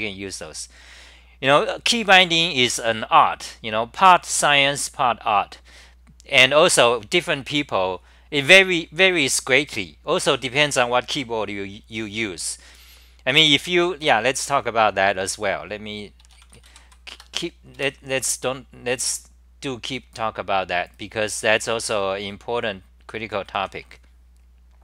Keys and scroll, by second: 17.2 Return, 17.8 super+r.